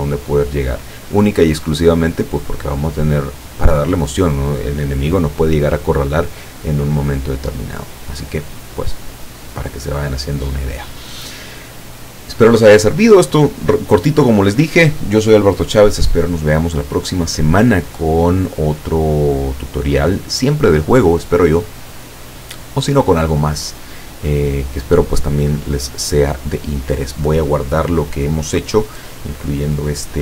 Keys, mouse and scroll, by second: 29.9-30.2 drag.